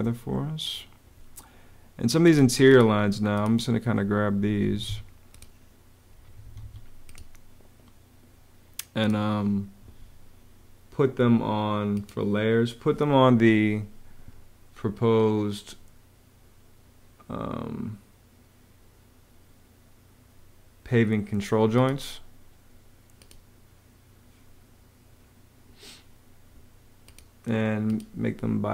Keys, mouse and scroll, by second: 4.2 Escape, 6.0 Escape, 7.3 Escape.